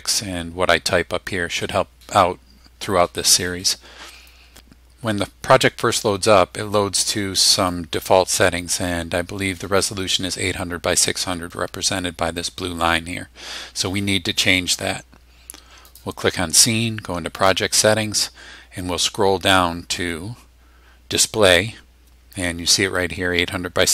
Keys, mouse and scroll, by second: 0.3 click, 7.7-8.9 drag, 15.8 click, 17.4 click, 19.8-20.3 scroll down 2, 21.8 scroll down 1.